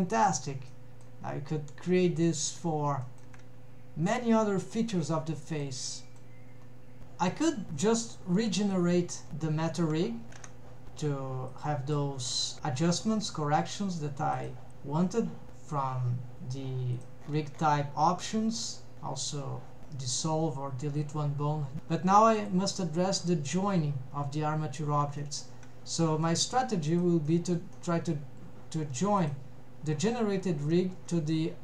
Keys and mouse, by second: 0.1 click, 0.4 g, 2.4 click, 2.7 g, 2.8 click, 3.6 g, 3.8 drag, 4.1 click, 4.3 g, 4.5 click, 4.9-5.4 middle drag, 6.3 middle drag, 7.0 alt+a, 8.2 click, 10.5 ctrl+Tab, 12.0 click, 17.0 drag, 19.0 ctrl+Tab, 19.0 click, 22.4 click, 25.3 shift+middle click, 26.9 click, 27.3-27.7 middle drag, 27.8-28.2 middle drag, 29.2 click.